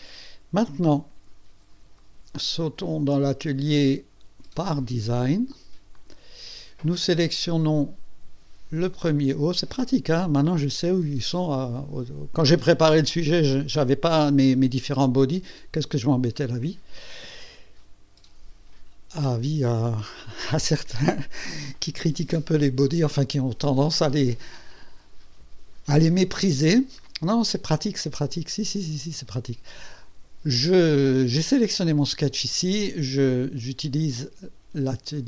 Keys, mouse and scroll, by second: 3.4 click, 4.6 click, 6.0 click, 8.9 click.